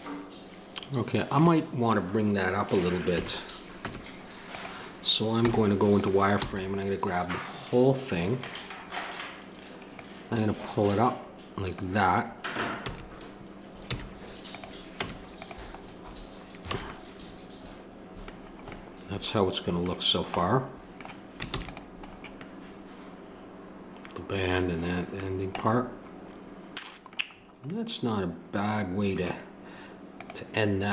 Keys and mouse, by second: 1.3-3.1 drag, 3.1 KP_3, 3.8 Tab, 5.4 z, 6.4 b, 9.9-12.8 drag, 12.8 a, 13.9 z, 15.0 Tab, 16.7 a, 21.5 ctrl+s.